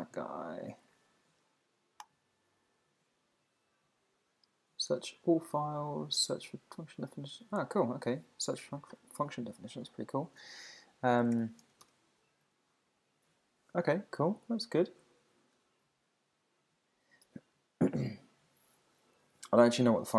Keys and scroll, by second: 14.0 Down.